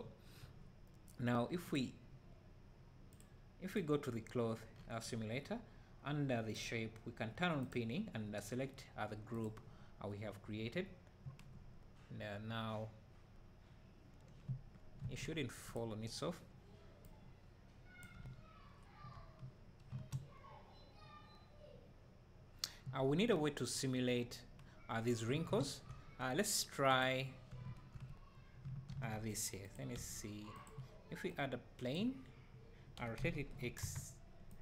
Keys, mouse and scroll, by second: 9.5-15.8 drag, 11.3 space, 15.2 Escape, 17.1-27.1 drag, 27.7 `, 28.9 shift+d, 32.0-34.6 drag.